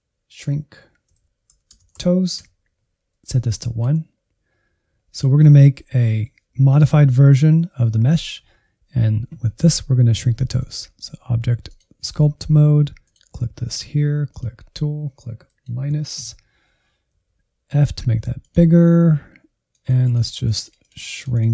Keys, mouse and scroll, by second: 2.8 scroll down 1, 3.2-5.0 drag, 5.0-5.6 scroll up 1, 10.5-17.1 drag, 17.1 f, 18.8-19.2 scroll up 3, 19.6-21.5 drag.